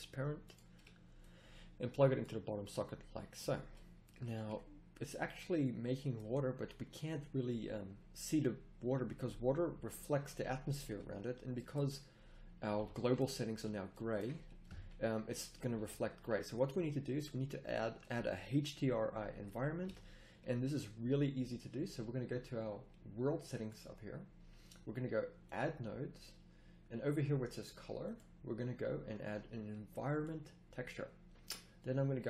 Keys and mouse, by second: 4.3 a, 12.1 middle click, 12.6 z, 12.7 z, 14.6 KP_0, 15.7 a, 19.8 a.